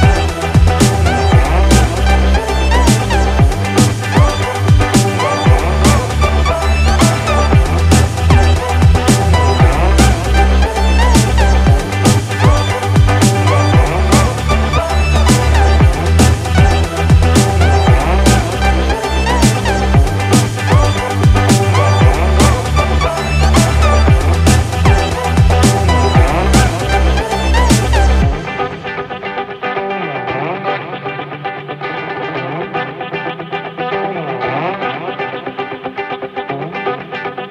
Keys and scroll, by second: 0.9 ctrl+-, 23.3 ctrl+=.